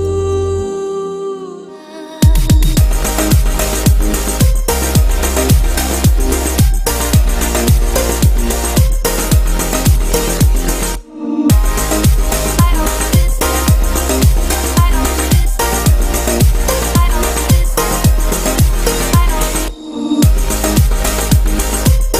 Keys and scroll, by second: 1.0 ctrl+d.